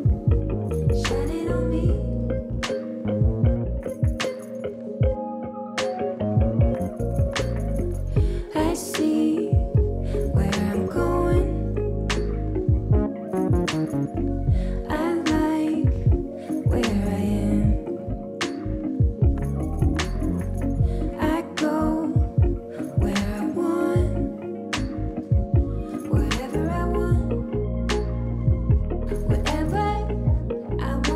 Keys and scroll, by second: 1.7 ctrl+g, 2.1 space, 7.8 Down, 7.9 Down, 8.1 Down, 8.8 ctrl+-.